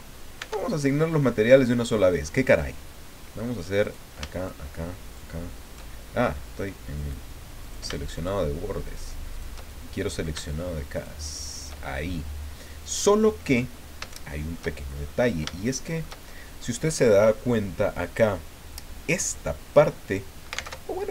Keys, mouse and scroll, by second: 3.8 right click, 4.4 shift+right click, 5.0 shift+right click, 7.0 right click, 7.6 shift+right click, 8.1 shift+right click, 8.9 shift+right click, 9.3 shift+right click, 9.7 shift+middle click, 10.9 shift+right click, 11.4 shift+right click, 12.1-13.1 shift+middle drag, 13.4-13.9 scroll up 4, 14.1 shift+middle click, 14.9-15.2 shift+scroll up 3, 15.5 shift+click, 20.7 alt+Tab.